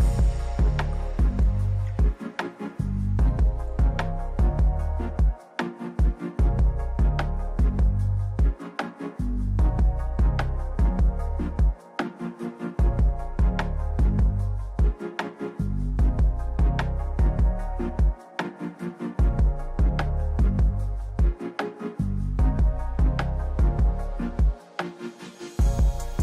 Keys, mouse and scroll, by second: 0.2 click, 2.1 click, 4.1 click, 4.8 click, 5.6 click, 7.1-7.6 scroll, 7.7 click, 8.1-9.9 typing, 9.1 middle click, 9.1 scroll, 9.2 right click, 9.5 middle click, 10.1 middle click, 10.3 middle click, 11.1 click, 11.1-11.7 scroll down 1, 11.7 right click, 12.1 click, 12.3 Down, 12.3 Left, 13.1 click, 14.1 right click, 14.1 click, 14.7 click, 16.3 middle click, 16.6 click, 17.3 click, 17.3-19.1 typing, 18.3 click, 19.1 Left, 19.4 right click, 20.1 g, 20.8 Down, 21.1 click, 22.1 click, 23.3 Down, 24.2 right click, 25.5 middle click, 25.9 right click.